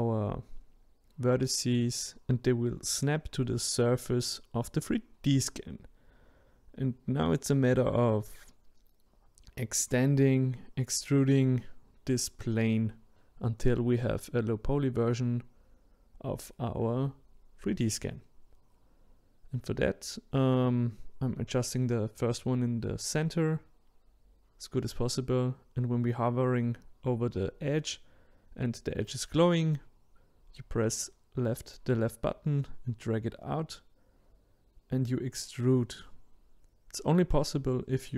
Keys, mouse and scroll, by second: 4.7-6.2 scroll up 4, 6.2-17.0 drag, 22.8-31.4 drag, 34.6-36.0 drag, 36.0-36.6 scroll down 2, 36.6-38.1 middle drag.